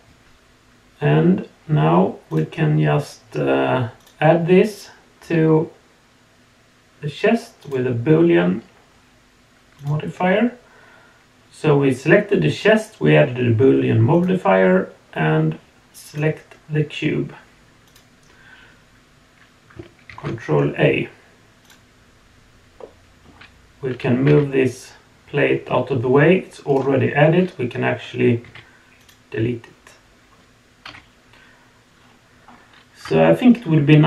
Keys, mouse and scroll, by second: 1.6 click, 2.3 click, 4.0-7.7 drag, 9.8 click, 14.1 click, 17.8 click, 20.2 ctrl+a, 21.6 click, 22.8-23.2 middle drag, 24.2 g, 30.8 KP_1, 31.9 scroll up 2, 32.4 scroll down 1, 33.2 shift+middle click.